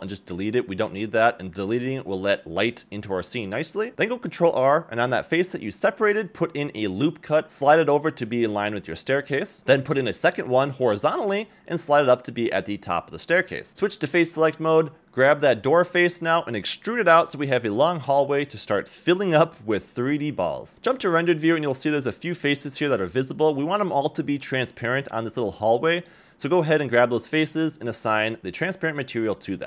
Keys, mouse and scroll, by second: 1.9 middle click, 2.9 click, 3.4 middle click, 3.9 scroll up 1, 4.4 ctrl+r, 8.3 ctrl+r, 13.7 middle click, 13.9 3, 14.4 click, 14.9 scroll down 1, 15.0 middle click, 15.7 click, 16.0 e, 18.1 scroll down 1, 18.3 middle click, 20.5 middle click, 21.4 click, 22.5 middle click, 23.2 middle click, 24.0 click, 24.6 shift+click, 25.6 click, 26.6 click, 27.1 a, 27.2 a, 27.4 middle click, 28.7 middle click.